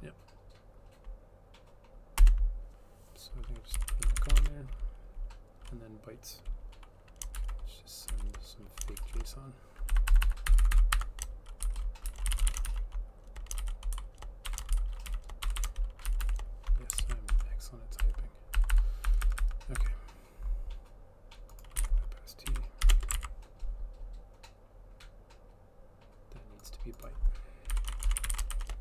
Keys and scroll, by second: 2.2 Return, 3.7-4.9 typing, 7.4 {, 8.8-16.7 typing, 10.0 Left, 10.1 Left, 17.1 ctrl+s, 17.8-19.1 typing, 21.6-25.4 typing, 27.5-28.8 typing.